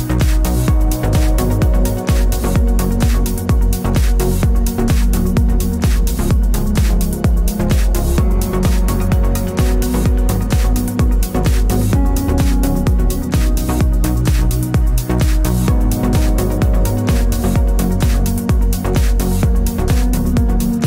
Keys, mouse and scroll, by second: 3.1 ctrl+t, 3.5 click, 4.6 KP_Enter, 5.4 ctrl+s, 8.1 ctrl+j, 10.1 click, 11.0 u, 11.7 click.